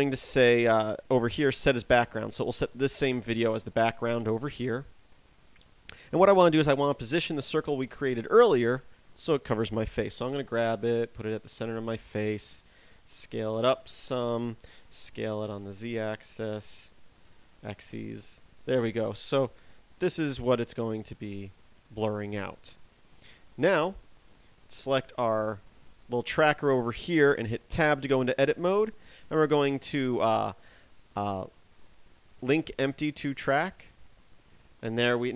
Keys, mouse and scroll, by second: 2.0 click, 8.1 right click, 10.5 g, 12.3 click, 12.8 s, 14.7 click, 15.3 s, 16.4 click, 16.6 s, 18.7 click, 20.8 s, 23.3 click, 24.9 right click, 27.9 Tab, 34.1 click.